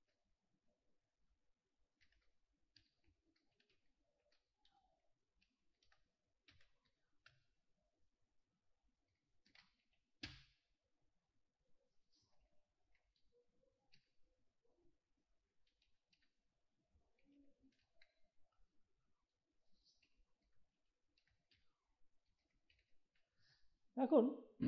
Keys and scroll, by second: 2.0-7.3 typing, 9.2-10.7 typing, 12.3 space, 13.0 9, 13.9 0, 15.4-18.3 typing, 20.0-23.4 typing.